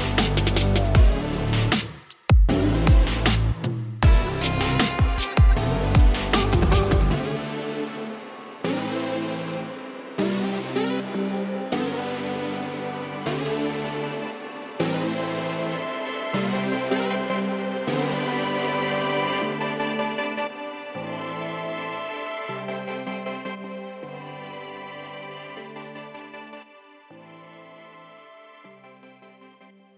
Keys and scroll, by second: 18.9 space, 21.6 alt+space, 22.8 alt+space, 23.8 typing.